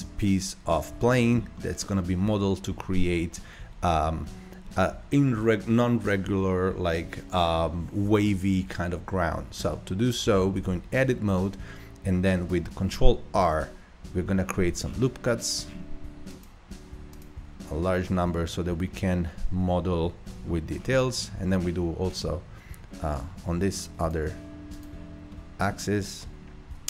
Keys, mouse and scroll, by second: 0.1-0.7 scroll up 1, 1.0-1.4 shift+middle drag, 1.4 shift+scroll up 1, 1.6-4.7 middle drag, 10.6 Tab, 13.3 ctrl+r, 17.6 middle click, 18.5-18.9 scroll down 3, 18.9-20.1 middle drag, 20.1 ctrl+r, 25.3-26.7 middle drag, 26.7 Tab.